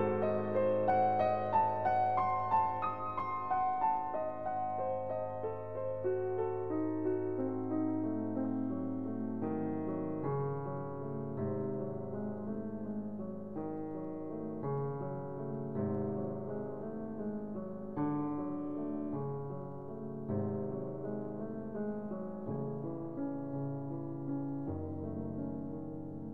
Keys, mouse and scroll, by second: 1.8 click, 2.3 click, 4.5 click, 6.3 click, 12.7 click, 15.3 click, 16.8 click, 18.6 click, 20.1 click, 21.8 click, 22.7 click.